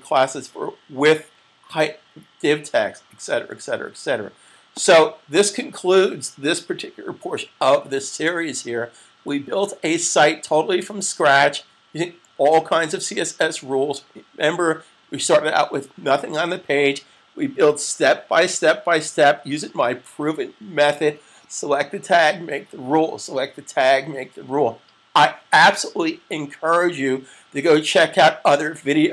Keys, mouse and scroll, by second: 4.2 super+s, 4.7 click.